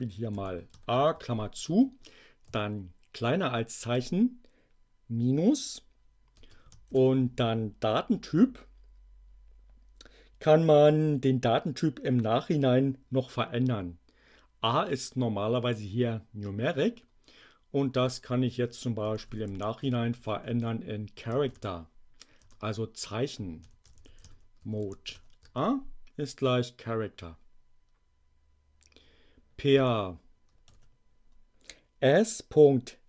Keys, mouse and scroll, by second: 0.3 a, 0.9 shift+9, 1.6 space, 2.4 <, 3.9 -, 6.3 space, 6.9 shift+2, 17.8-21.4 typing, 22.4 Return, 23.3-25.1 typing, 25.6 shift+Return, 29.7 y, 30.6 shift+0.